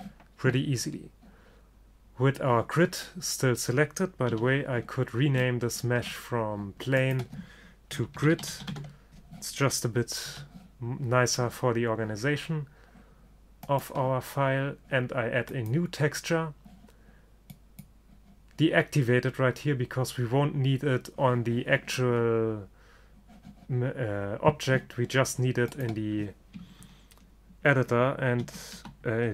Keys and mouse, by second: 4.4 n, 7.1-8.9 drag, 10.4 n, 13.8-15.5 drag, 15.7-17.5 drag, 17.6-19.6 drag, 25.9-27.7 drag.